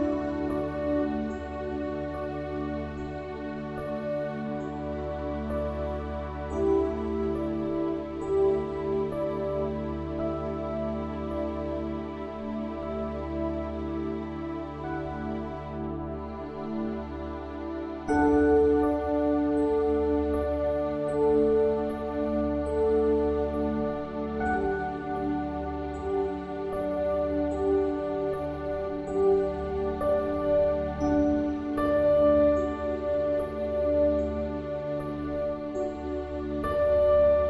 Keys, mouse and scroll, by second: 2.9 ctrl+r, 6.6 ctrl+r, 12.1 middle click, 12.5 ctrl+r, 19.7 middle click, 21.4 middle click, 22.2 middle click, 23.0-25.9 middle drag, 27.4 middle click, 28.1-29.4 middle drag, 29.4 ctrl+r, 32.4 Tab, 33.4-35.2 middle drag.